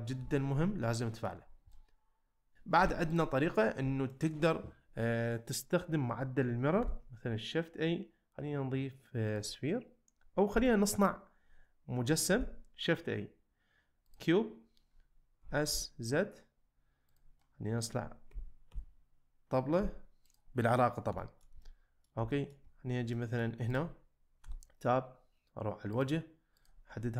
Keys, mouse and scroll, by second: 0.2 z, 1.0 middle click, 1.7 middle click, 2.5 Tab, 2.8 x, 4.1 shift+middle click, 6.8 shift+a, 10.5 x, 12.3 shift+a, 15.4 s, 15.7 z, 17.4 middle click, 18.3 g, 18.7 z, 19.8 z, 20.2 click, 21.2 shift+middle drag, 21.6-22.1 middle drag, 22.3 shift+middle drag, 23.1 middle click, 23.7 click, 24.4 Tab, 26.0 click, 26.6 click.